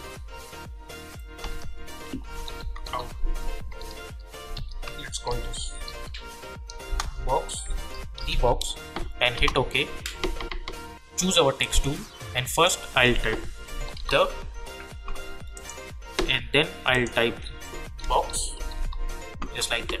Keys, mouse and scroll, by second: 2.1-3.3 typing, 4.5 ctrl+a, 5.0-8.8 typing, 9.3 Return, 11.6 click, 13.5-14.6 typing, 15.5 click, 18.0-19.2 typing.